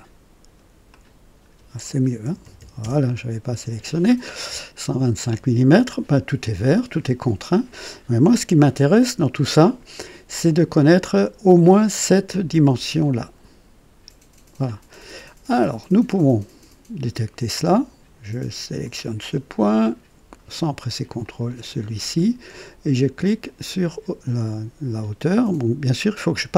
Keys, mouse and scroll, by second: 0.9 click, 2.2 KP_1, 2.4 KP_2, 2.5 KP_5, 2.8 Return, 4.3 scroll up 1, 4.7 right click, 18.8 click, 21.2 click, 23.2 click.